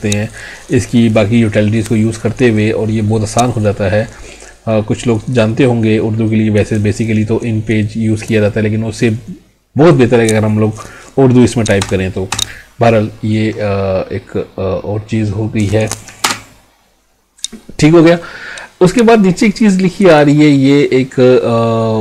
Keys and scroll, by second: 16.3 space.